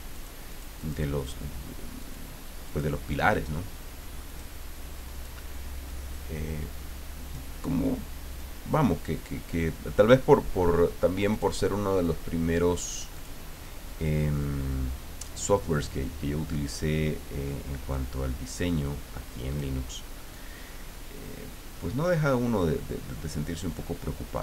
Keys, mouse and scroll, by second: 0.1 click, 0.5 click, 2.0 click, 2.7 click, 4.2 click, 5.9-7.7 drag, 8.4-10.3 drag, 11.3 click, 13.2 click, 17.9-19.8 drag, 20.3-23.8 drag.